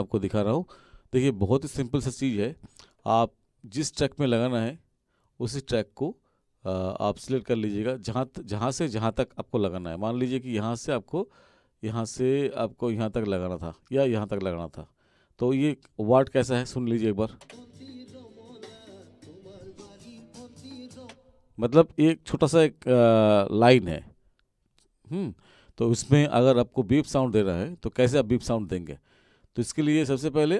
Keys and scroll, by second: 17.4 space, 21.0 space.